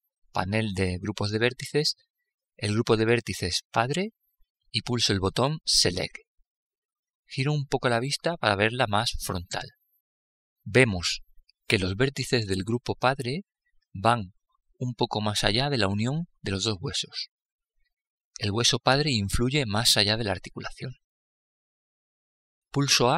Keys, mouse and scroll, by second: 2.8-4.8 drag, 5.1-7.0 drag, 6.3-8.3 middle drag, 10.5-12.3 scroll up 1, 12.3-14.3 middle drag, 22.5 a.